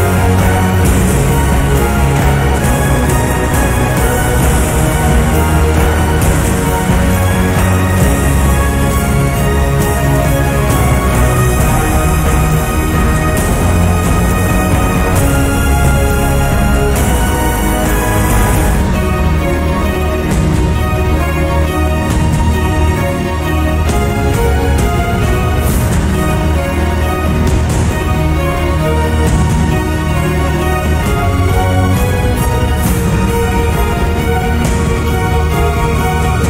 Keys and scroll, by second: 29.9-30.7 typing.